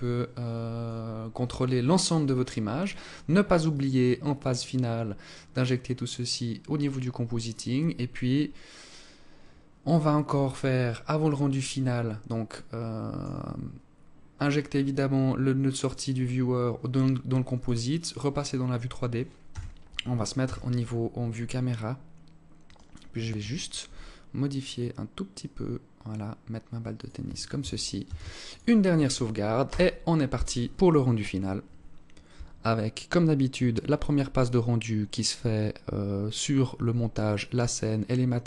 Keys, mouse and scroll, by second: 17.0 click, 17.6-18.1 scroll down 2, 18.4 KP_0, 19.4 KP_0, 20.2-21.0 scroll down 1, 21.6 right click, 22.8 g, 27.0 ctrl+s.